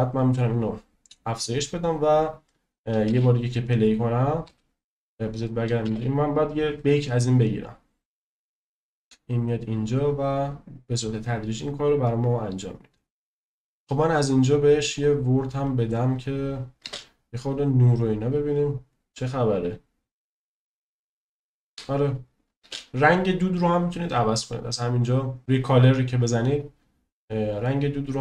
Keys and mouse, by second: 1.2-2.8 drag, 3.1 space, 4.4 space, 5.4 click, 5.8 space, 13.7-15.2 drag, 15.8 click, 16.8 space, 22.7 space, 25.4 right click, 27.6-27.9 right drag, 27.9 middle click.